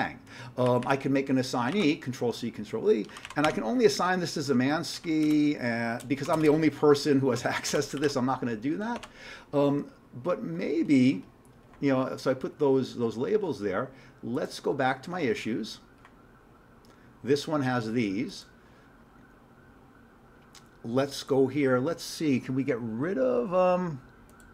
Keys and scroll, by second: 0.7 Down, 0.8 Down, 1.6 ctrl+c, 1.7 ctrl+e, 2.9-3.7 typing, 5.0 ,, 5.3 space, 6.4 BackSpace, 7.0 BackSpace, 8.0 ctrl+g, 8.9 alt+Tab.